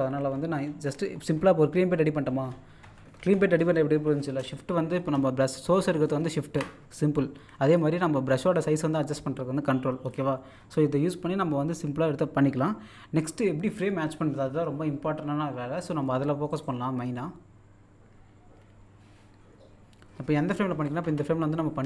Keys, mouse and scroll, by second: 1.5-2.9 scroll down 1, 5.0 scroll up 1, 5.7-7.3 shift+drag, 7.3 scroll up 1, 7.8 ctrl+click, 10.6-11.4 scroll up 1, 16.1 middle click, 16.5 right click.